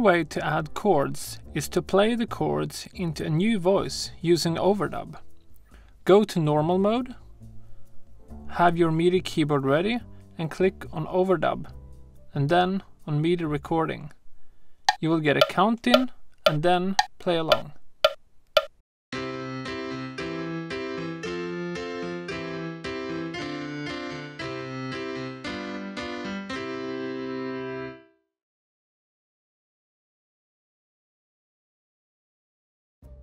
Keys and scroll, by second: 27.5 space.